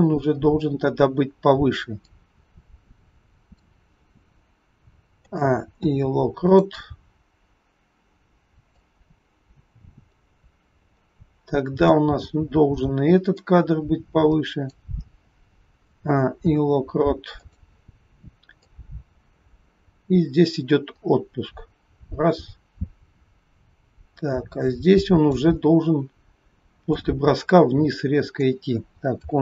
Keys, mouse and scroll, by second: 0.1-1.3 scroll down 1, 2.0 click, 5.6 a, 5.6 i, 7.1-8.0 scroll down 2, 8.9 click, 13.2 click, 15.7 a, 16.3 i, 18.6 click, 25.7-26.1 scroll down 2, 26.8 click.